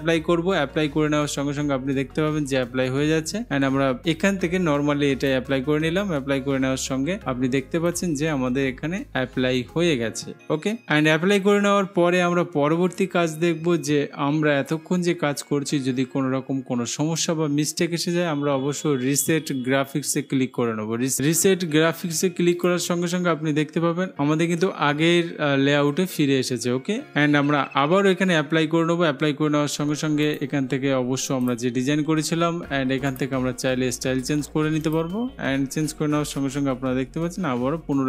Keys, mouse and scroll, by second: 5.5-6.5 drag, 8.1 click, 22.8 click.